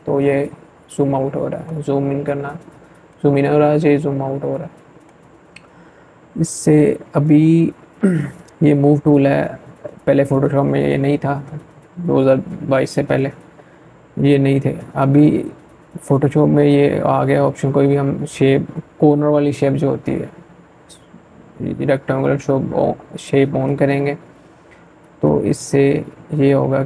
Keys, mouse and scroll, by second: 0.8-1.6 scroll up 1, 1.6-2.5 scroll down 1, 2.5-2.8 scroll up 1, 3.8-4.4 scroll up 2, 23.4-26.8 drag.